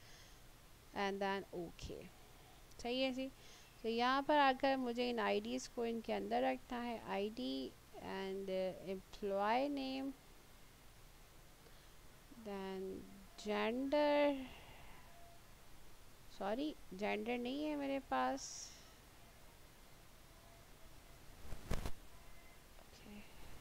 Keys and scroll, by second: 17.1 ctrl+x, 17.2 ctrl+z, 21.1 ctrl+z.